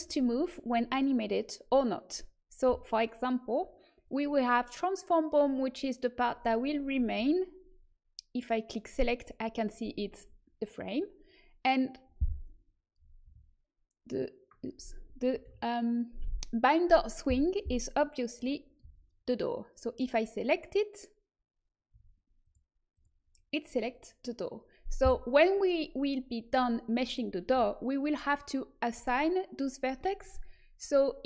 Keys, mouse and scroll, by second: 4.0-7.2 drag, 8.7-11.8 drag, 13.2 a, 15.4 a, 18.8 a, 19.8-21.9 drag, 21.9 a, 26.7-31.2 middle drag.